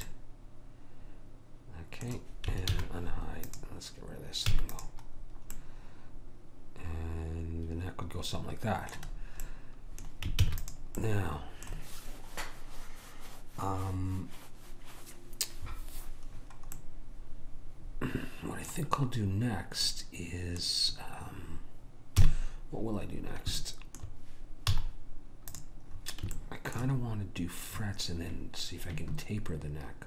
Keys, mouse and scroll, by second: 0.1 right click, 0.5 middle click, 2.9 alt+h, 3.5 click, 4.5 x, 9.5-10.5 middle drag, 10.5 ctrl+s, 16.8-19.7 middle drag, 19.7-20.0 scroll up 1, 20.0 middle click, 22.1 KP_1, 25.4 z.